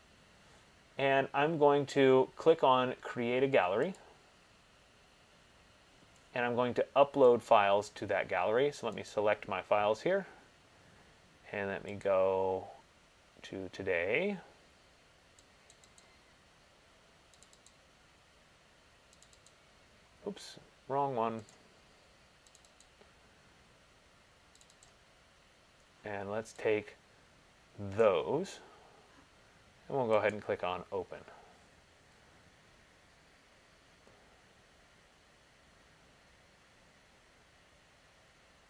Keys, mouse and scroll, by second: 4.2 click, 7.7 click, 12.2 click, 15.9 click, 16.2 click, 17.6 click, 17.8 click, 19.4 click, 19.6 click, 21.7 click, 22.7 click, 23.0 click, 24.8 click, 25.1 click, 28.1 click, 30.6 click.